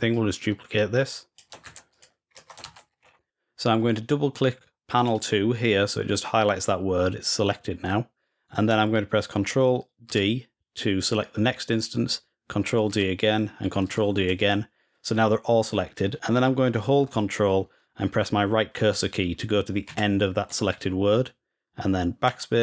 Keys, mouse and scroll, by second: 1.4 ctrl+c, 1.7 click, 2.4 ctrl+v, 2.8 scroll down 1, 3.2 scroll up 1, 4.7 click, 4.9 click, 9.8 ctrl+d, 12.7 ctrl+d, 13.6 ctrl+d, 19.6 ctrl+Right.